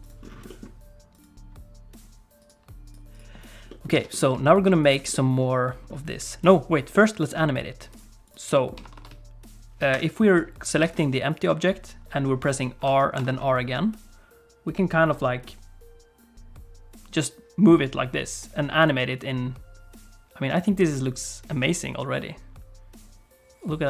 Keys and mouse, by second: 0.4 middle click, 2.8 click, 3.1 click, 3.7 alt+middle click, 3.9 alt+a, 4.4 click, 4.8 click, 5.1 middle click, 6.9 middle click, 7.9 click, 8.5 shift+middle click, 8.8 r, 10.8 alt+a, 11.3 click, 12.8 r.